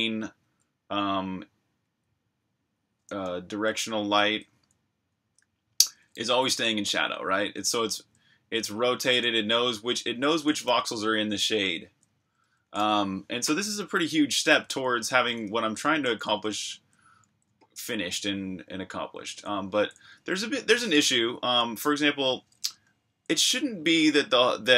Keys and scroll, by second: 0.4 c, 1.8 c, 3.1-5.9 typing, 7.8-9.5 typing, 10.6 typing, 13.1-16.5 typing, 19.0-21.6 typing, 22.9-23.2 k, 23.4 j.